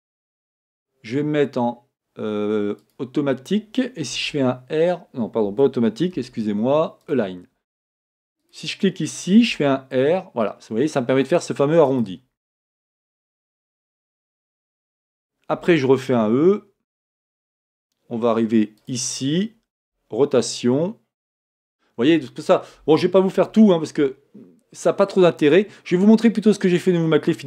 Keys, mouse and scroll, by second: 3.0 v, 8.6 click, 9.6 r, 12.8-26.1 shift+middle drag, 13.6-14.0 scroll down 2, 15.6 e, 19.9 r, 26.1-27.4 scroll down 2.